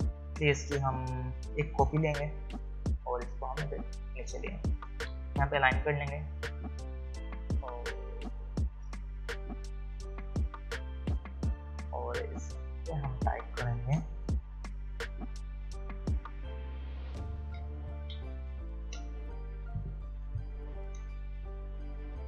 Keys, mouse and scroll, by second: 3.2-5.3 alt+drag, 14.6 Right, 16.6 shift+Left, 19.9-22.2 typing.